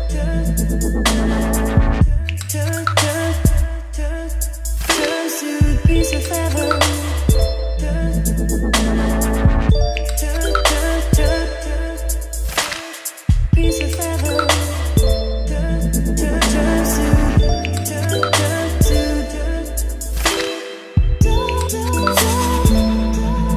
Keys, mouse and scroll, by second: 1.3 Return, 6.2-7.6 typing, 7.9 Return, 10.9 i, 13.0 Return, 14.2-17.7 typing, 18.6 Return, 19.8-23.5 typing.